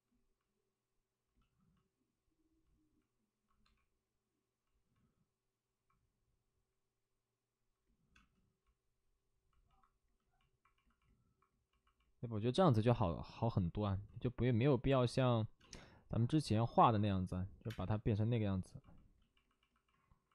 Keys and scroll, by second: 3.5 2, 8.1 space, 14.0 ctrl+z, 15.5 space, 17.5 3, 19.8 space.